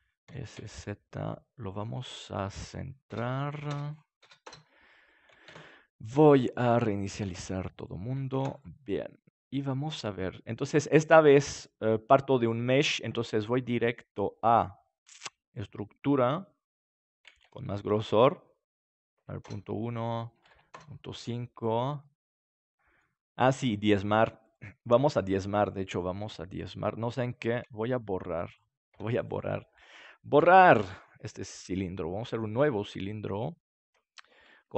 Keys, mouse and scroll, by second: 0.2 s, 1.6-6.5 drag, 5.4 ctrl+a, 7.1 ctrl+a, 8.3 ctrl+s, 8.8 middle click, 11.0-14.7 drag, 17.5-19.5 drag, 19.9-21.6 drag, 21.6 middle click, 24.4-26.9 drag, 27.0-30.3 drag, 28.9 s, 30.3 Delete, 32.4-34.2 drag, 34.2 middle click.